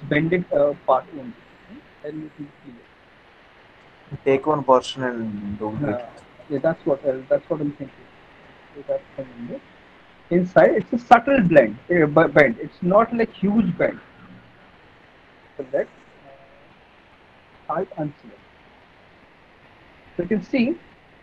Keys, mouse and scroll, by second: 0.1 middle click, 0.8 middle click, 1.0 middle click, 1.7 alt+middle click, 2.3 middle click, 2.6 middle click, 4.0 alt+middle click, 4.9 middle click, 6.3 middle click, 6.7 middle click, 7.0 middle click, 7.1 alt+middle click, 8.2 alt+middle click, 8.4 middle click, 10.0 alt+middle click, 10.5 middle click, 11.1 alt+middle click, 11.5 middle click, 12.2 alt+middle click, 14.5 click, 15.4 right click, 17.8 click, 19.3 alt+middle click, 19.7 click, 20.1 middle click, 20.5 middle click.